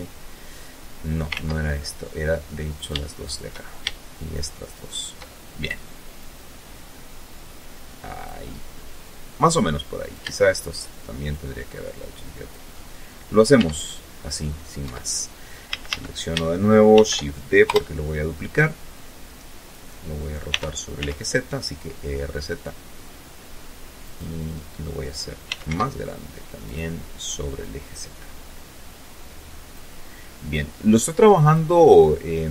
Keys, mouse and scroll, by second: 0.4 ctrl+middle click, 1.4 shift+right click, 1.8 shift+right click, 2.3 shift+middle click, 2.9 shift+right click, 3.4 shift+right click, 3.8 shift+middle click, 4.8-7.0 drag, 7.1 middle click, 8.6 shift+right click, 9.1 shift+right click, 9.9 click, 11.4 middle click, 12.2 Tab, 12.6-13.0 scroll down 2, 13.0-13.3 scroll up 2, 13.4 Tab, 14.3 a, 14.9 shift+a, 15.5 shift+d, 16.2 Return, 17.2-18.5 drag, 19.1 r, 19.5 z, 22.6 click, 24.0 s, 24.2 z, 25.2 click, 26.2-28.5 drag, 29.1-30.3 drag, 30.4-31.4 middle drag, 32.0 click.